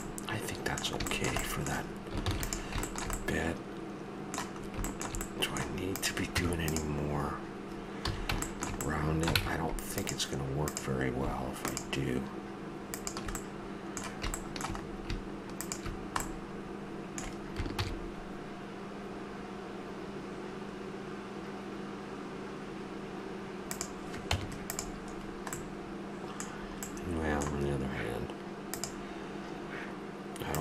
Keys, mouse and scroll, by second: 2.3 ctrl+s, 6.3 Tab, 8.1 a, 9.4 ctrl+Tab, 13.5-14.6 middle drag, 14.6 click, 14.8 middle click, 14.9 click, 15.5-20.9 middle drag, 17.8 ctrl+b, 24.3 Tab, 25.2-26.6 drag, 26.6 middle drag, 26.8 middle click, 27.0 middle drag, 28.7-30.6 drag.